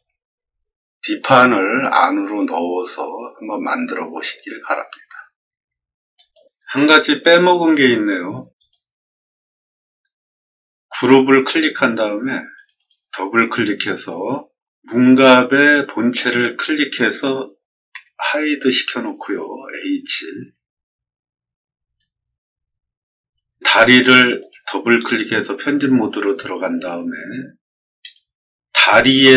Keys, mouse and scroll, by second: 6.1 click, 8.5 click, 12.4 click, 12.7 click, 16.1 click, 17.8 h, 21.5 middle click, 22.4-22.7 scroll down 2, 24.1 click, 24.3 click, 26.2 scroll up 2, 26.2 middle click, 27.9 click.